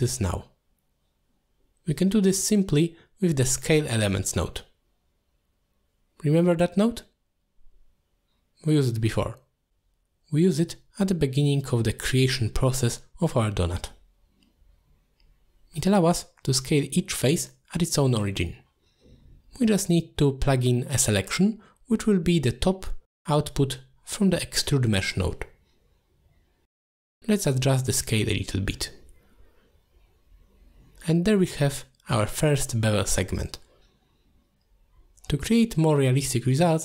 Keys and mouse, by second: 0.2 g, 0.7 click, 1.3-4.5 drag, 5.0 alt+shift+click, 5.6 click, 6.5-8.2 shift+drag, 8.5 click, 13.5 middle click, 13.8 middle click, 14.1 middle click, 15.4-15.8 middle drag, 16.3 click, 17.7 middle click, 18.1 middle click, 18.6 middle click, 19.0 middle click, 19.8 middle click, 21.8-23.0 drag, 28.2-29.7 shift+drag, 30.1-32.9 drag, 34.2-36.0 drag.